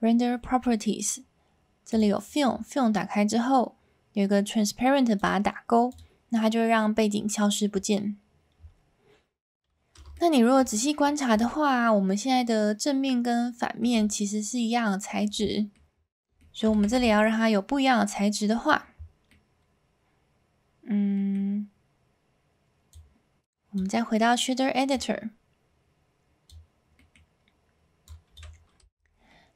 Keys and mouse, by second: 1.9 click, 5.2 click, 5.9 click, 6.4-7.4 middle drag, 10.1-10.5 shift+middle drag, 11.8-13.8 middle drag, 14.1-15.2 shift+middle drag, 15.5 middle drag, 16.2 s, 16.3 middle drag, 16.7 a, 19.3-21.3 middle drag, 22.9 click.